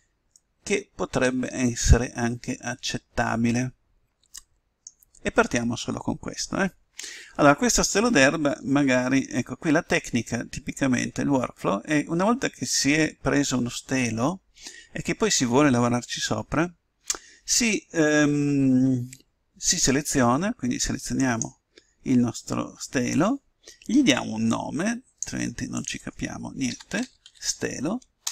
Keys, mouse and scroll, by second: 9.4-17.1 middle drag, 21.1-23.0 right drag, 24.4-27.5 drag.